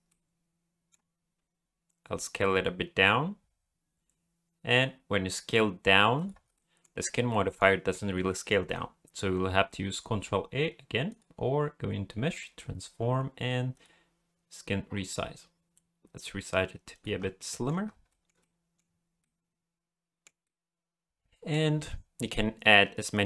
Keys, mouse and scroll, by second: 0.1 middle click, 1.3 s, 6.5 shift+middle click, 7.3 middle click, 7.7-8.2 scroll up 2, 8.3 shift+middle click, 11.1 click, 17.2 scroll down 2, 17.4 middle click, 17.9 scroll down 1, 18.1 shift+middle click, 18.4 middle click, 18.8-19.2 scroll up 2, 19.2 middle click, 20.4 middle click, 23.1 click.